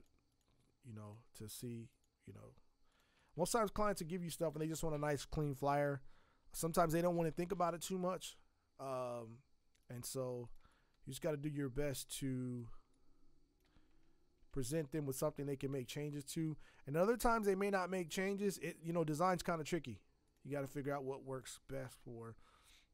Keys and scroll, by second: 4.5 ctrl+t, 14.5 ctrl+z.